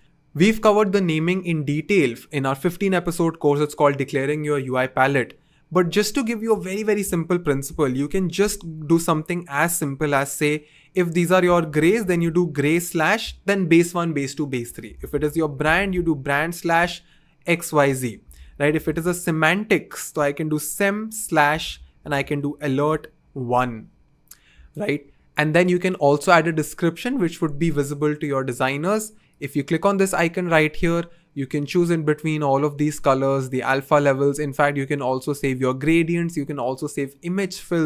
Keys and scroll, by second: 11.4-12.8 typing, 14.9 super+a, 15.0-16.6 typing, 18.3 super+a, 18.6-23.4 typing.